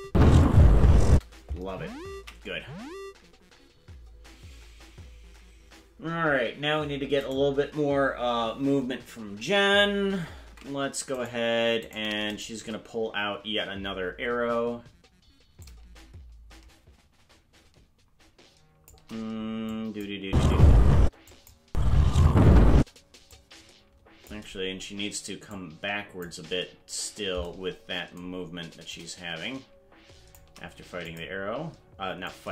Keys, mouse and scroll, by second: 0.0 space, 1.1 space, 4.3 ctrl+s, 7.4 right click, 10.5 ctrl+Tab, 11.2 right click, 11.9 shift+right click, 12.4 shift+right click, 15.6-18.9 shift+drag, 19.7 click, 20.2 space, 21.0 space, 21.3 click, 21.6 space, 22.8 space, 23.3-24.4 drag, 25.5 click, 28.9-30.4 shift+drag, 31.1 click, 32.3 click.